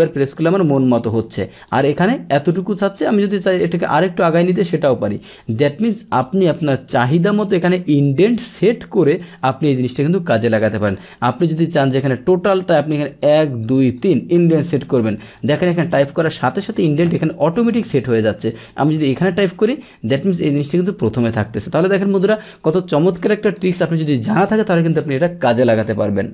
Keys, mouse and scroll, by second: 0.3 click, 1.5 click, 3.6 click, 5.4 click, 6.2 click, 10.9 click, 11.8 click, 13.2 click, 13.6 click, 13.9 click, 14.6 click, 15.3 click, 16.3 click, 17.1 click, 18.6 click, 19.4 click, 20.1 click, 22.5 click.